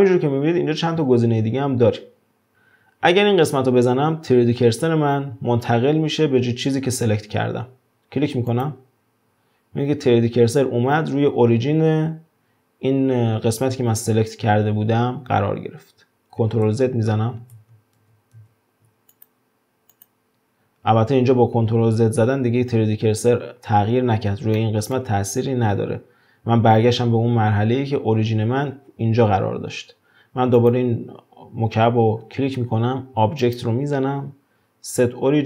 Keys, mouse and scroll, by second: 16.7 ctrl+z, 17.6 ctrl+z, 18.4 ctrl+z, 19.1 click, 19.9 click, 24.6 shift+middle click, 25.3 scroll up 1, 30.6 click, 33.4-35.4 drag.